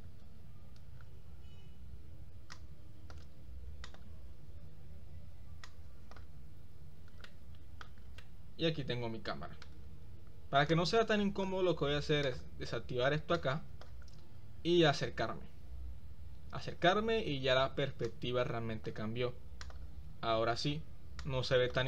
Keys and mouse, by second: 2.5 click, 5.6 click, 7.4-8.1 shift+middle drag, 8.4-9.9 middle drag, 10.9 click, 13.3 click, 18.0 click, 19.6 click, 21.2 click.